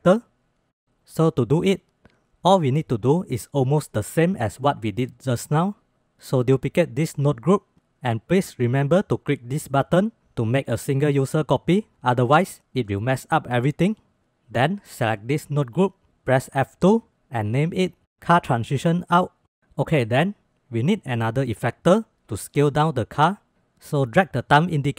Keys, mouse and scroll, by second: 5.9 click, 6.7 shift+d, 7.9 drag, 11.2 click, 14.7-15.8 drag, 16.6 F2, 17.3 shift+Left, 18.0 BackSpace, 24.4-24.9 drag.